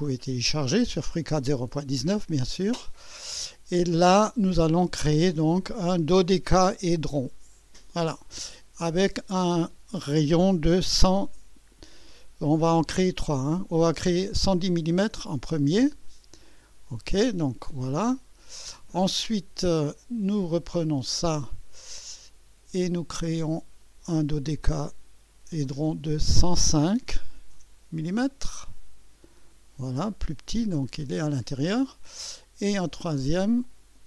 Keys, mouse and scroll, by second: 2.4 click, 7.5 click, 8.8 click, 10.8 KP_1, 14.6 KP_1, 14.9 KP_0, 16.4 click, 17.7-18.7 drag, 19.8 click, 20.1-20.4 typing, 22.0 click, 24.4 click, 25.7 click, 27.2 typing, 29.2 click, 33.6 click.